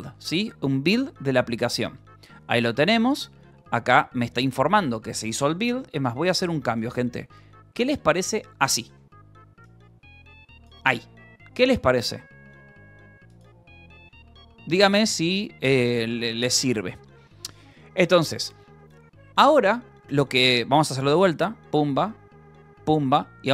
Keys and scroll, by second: 0.0-0.2 typing, 0.5 Return, 15.9 j, 16.2 k, 17.0 j, 17.9 j, 22.9-23.5 typing.